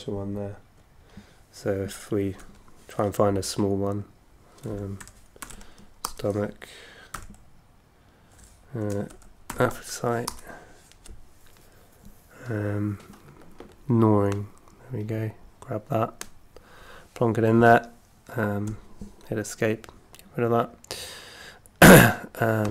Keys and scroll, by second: 2.4 F2, 4.4-6.0 typing, 6.0 Return, 7.1 h, 8.8 BackSpace, 9.1 a, 9.5 p, 10.2 Return, 18.7 Escape, 20.7 ↺.